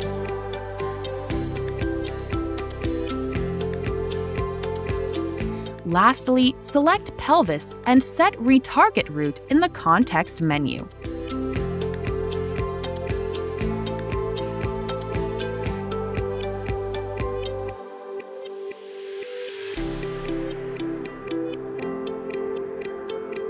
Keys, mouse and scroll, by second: 1.7 click, 1.8 click, 5.5 click, 6.8 right click, 8.7 click, 13.7 click, 15.5 click, 17.4 click, 19.1 click, 22.8 right click.